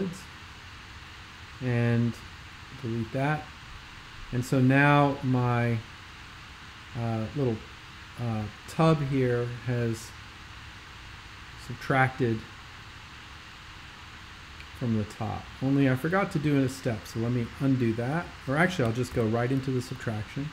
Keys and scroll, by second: 19.2 super+[, 19.9 x.